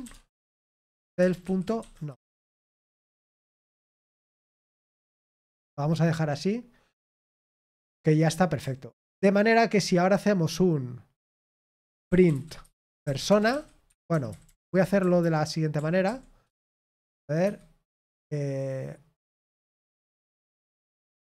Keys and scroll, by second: 0.0-5.9 typing, 12.6-16.2 typing, 17.4 typing, 21.1-21.3 typing.